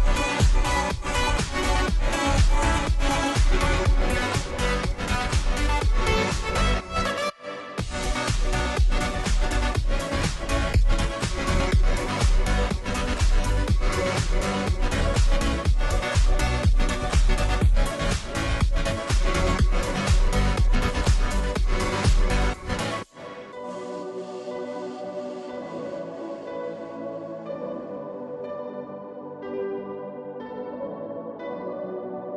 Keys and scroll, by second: 10.4 ctrl+t, 15.2 Return, 19.3-20.8 typing, 20.8 Return, 29.3 [, 30.5 typing, 32.2 ].